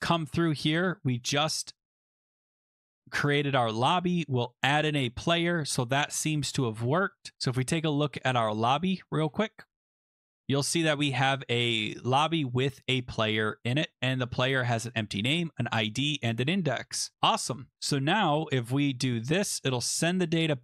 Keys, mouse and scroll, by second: 0.1 click, 4.6 click, 5.9-6.5 scroll, 7.2 click, 7.4-7.8 scroll, 8.0-9.4 scroll, 9.6 middle click, 9.7 click, 10.2 click, 12.0 click, 12.0 scroll, 13.8 click, 14.7 click, 15.4 click, 20.2 click.